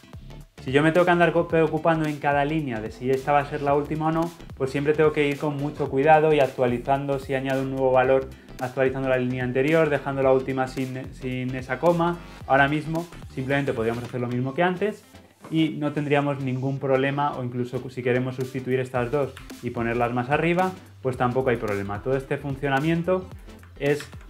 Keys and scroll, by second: 13.0 ctrl+d, 19.4 ctrl+x, 20.6 ctrl+v.